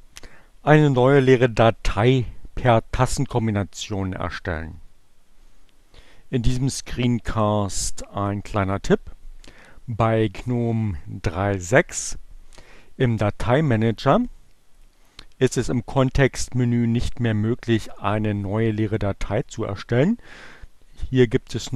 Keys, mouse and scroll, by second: 14.9 right click.